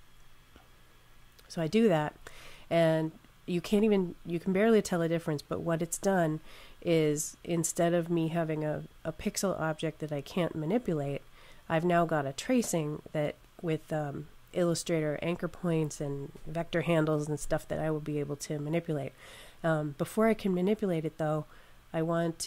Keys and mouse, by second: 8.6 click.